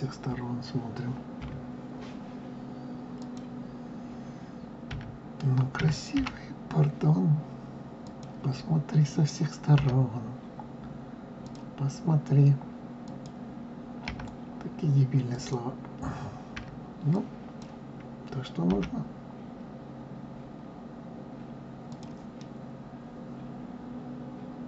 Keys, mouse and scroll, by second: 1.4 KP_3, 3.1 click, 4.8 d, 5.7 d, 6.1 g, 9.7 r, 12.9 click, 14.0 d, 15.3 click, 16.5 d, 17.0 click, 18.7 g, 22.3-24.6 middle drag.